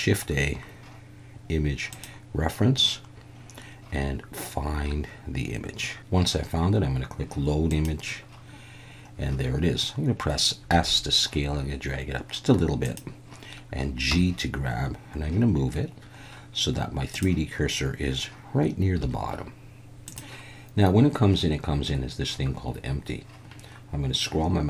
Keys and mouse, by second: 10.7 s, 12.8 click, 14.1 g, 17.1 click, 19.0 g, 20.1 click.